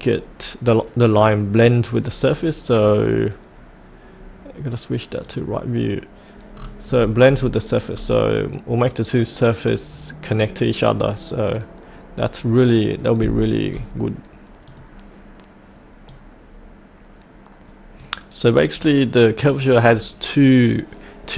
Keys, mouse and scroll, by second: 1.9 click, 2.2-5.2 scroll down 1, 5.2 click, 6.5-6.8 scroll down 1, 7.9-9.1 scroll up 1, 9.1-10.5 drag, 13.7-14.6 scroll up 1, 14.6-21.3 drag.